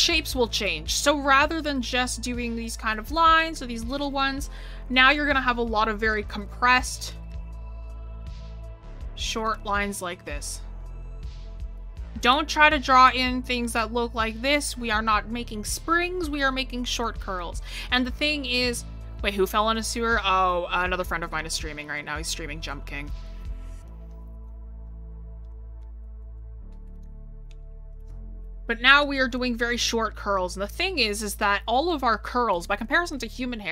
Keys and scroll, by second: 4.4 ctrl+z, 15.1 ctrl+z.